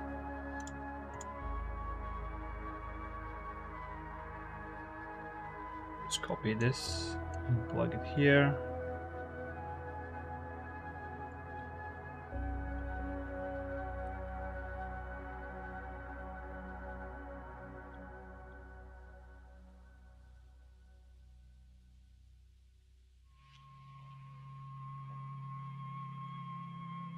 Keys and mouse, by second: 0.9-2.3 drag, 3.9 click, 4.5 click, 5.1-5.5 drag, 5.8 shift+d, 6.4 click, 7.1-8.0 drag, 10.3 click, 11.6 click, 12.3 click, 12.6-14.4 drag, 15.4 click, 15.7 click, 18.0 click, 19.1 click, 22.3 click, 23.4 click, 24.6 ctrl+z, 26.1 click.